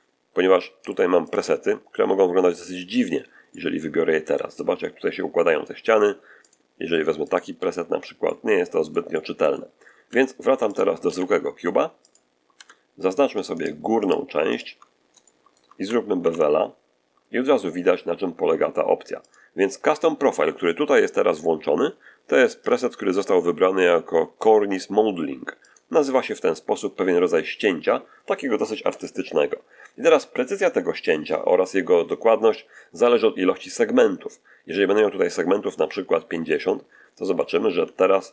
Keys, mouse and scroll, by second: 1.2 click, 2.6 click, 3.4-4.8 middle drag, 4.4-4.8 scroll up 2, 6.3 click, 7.2 click, 8.1-9.6 middle drag, 9.6-9.9 scroll down 1, 10.0 Tab, 10.4 x, 10.6 shift+click, 11.0 shift+a, 12.0 click, 12.4 Tab, 13.0 shift+right click, 13.5 shift+right click, 13.9 shift+right click, 14.4 shift+right click, 14.8 shift+scroll up 1, 15.1 shift+middle click, 16.1 ctrl+shift+b, 19.2 click, 19.6 middle click, 20.9-21.4 scroll down 2, 22.5 click, 25.6 click, 34.9-37.5 drag, 38.0 scroll up 2.